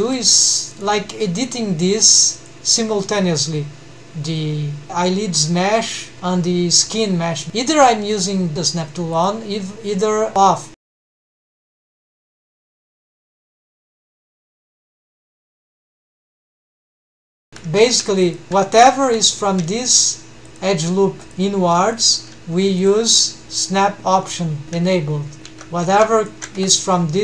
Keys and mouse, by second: 0.5 right drag, 2.1 click, 9.4 click, 11.5 g, 14.2 Escape, 15.1 click, 15.8 g, 17.5 alt+a, 17.5 1, 17.8 2, 18.2 alt+shift+click, 19.2 1, 23.0 click, 24.9 g, 25.7 alt+a, 26.0 2, 26.7 1.